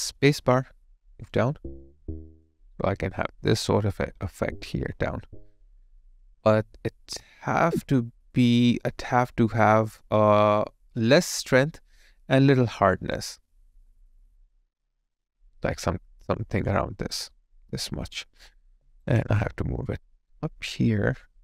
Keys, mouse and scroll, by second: 18.7 alt+right click.